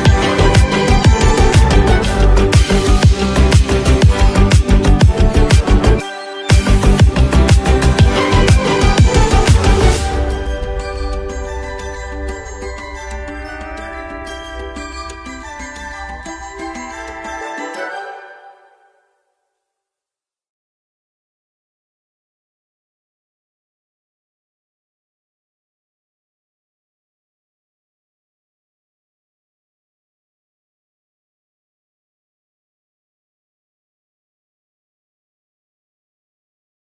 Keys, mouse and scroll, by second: 0.1 space, 0.2 click, 0.3 space, 2.6 x, 4.5-14.6 drag, 14.6 x, 15.1-16.8 drag, 16.8 ctrl+z, 18.2-21.8 drag, 21.8 ctrl+z, 22.9-23.3 alt+scroll down 1, 25.7 alt+scroll up 1, 26.0-27.6 drag, 27.6 ctrl+z, 29.3-35.9 drag.